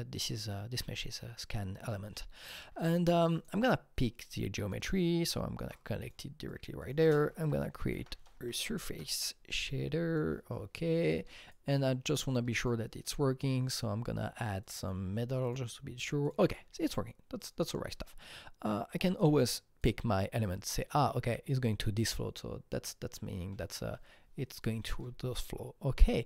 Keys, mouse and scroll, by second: 3.3-4.8 alt+middle drag, 3.3 click, 4.0 click, 4.8 shift+click, 6.1 shift+click, 7.0 ctrl+space, 7.0 ctrl+click, 7.4-8.6 typing, 8.9 Return, 9.6-12.6 drag, 12.6-14.6 drag, 14.6 click, 15.4 click, 16.2 click, 19.8 click.